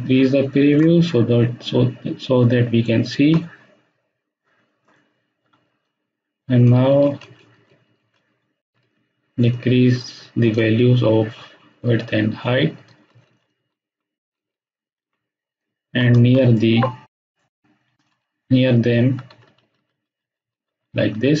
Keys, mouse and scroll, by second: 6.6 Down, 12.7 Down, 15.0 Up, 16.2 space, 16.5-17.4 ctrl+drag, 18.3 Down.